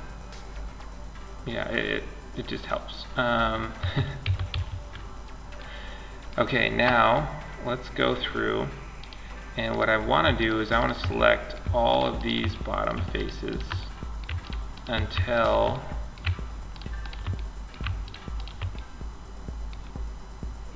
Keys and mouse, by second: 3.0 a, 3.4 a, 3.7 a, 4.9-6.9 drag, 7.3 click, 8.3-19.5 right drag, 19.5 middle click.